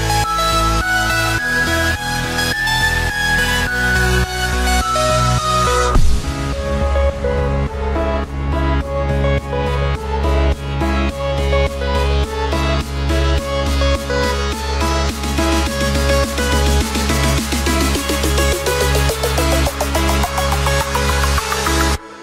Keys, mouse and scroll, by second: 1.6 shift+d, 7.6 click, 8.3-11.7 drag, 12.1 scroll down 3, 12.3-15.8 middle drag, 15.8 KP_7, 17.5 click, 18.4 s, 20.9-21.5 scroll up 2, 21.5-22.2 scroll up 5.